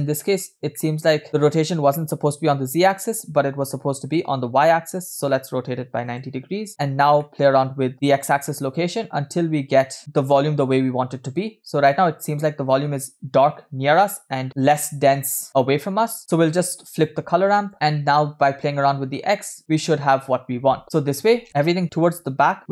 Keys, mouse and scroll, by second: 0.8 middle click, 1.5 scroll up 1, 1.9 middle click, 2.2 scroll up 2, 3.1-4.2 drag, 5.0-6.4 drag, 7.2 middle click, 7.9-11.9 drag, 16.5-17.2 drag, 17.7-19.6 drag.